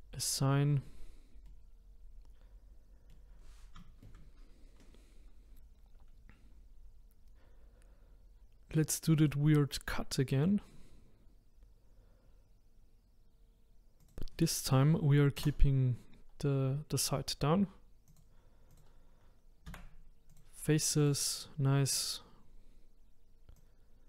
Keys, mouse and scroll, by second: 1.5-3.3 middle drag, 3.3-3.8 scroll down 1, 3.8-9.3 shift+middle drag, 9.3-14.1 drag, 18.2 click, 20.3 Delete, 21.0 click, 23.6 click.